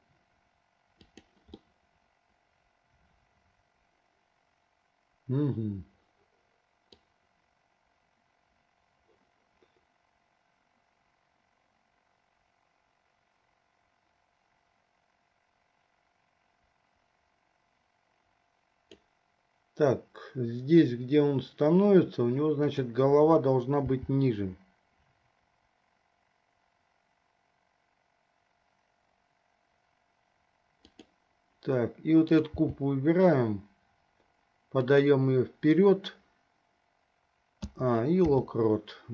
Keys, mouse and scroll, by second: 1.8 scroll up 1, 1.9-3.9 middle drag, 7.1-19.3 drag, 22.8 click, 24.2 g, 32.5 click, 33.0 g, 37.8 a, 38.7 i.